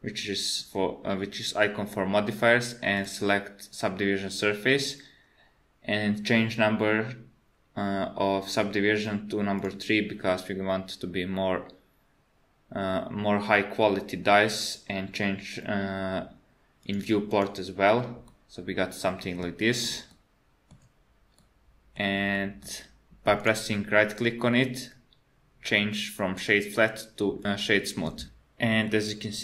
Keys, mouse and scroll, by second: 3.0 click, 4.3 click, 9.6 click, 16.8 click, 17.3 click, 18.3 middle click, 19.6 shift+middle click, 20.1 middle click, 21.4 middle click, 22.4 middle click, 23.4 right click.